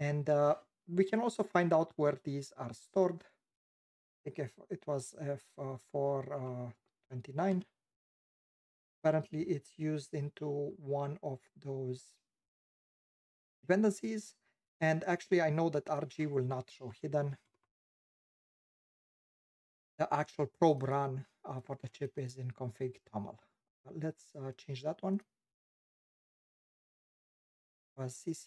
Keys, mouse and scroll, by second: 24.6 click.